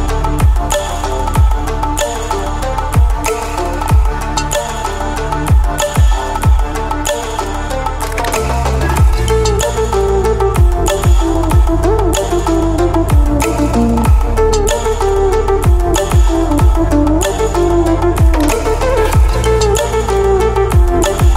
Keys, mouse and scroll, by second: 0.4-2.8 drag, 4.9-7.6 alt+drag, 7.6 ctrl+d, 9.9 ctrl+d, 11.4 ctrl+0, 15.5 alt+Num_Lock, 15.6-17.0 alt+scroll up 1, 17.8-21.3 drag.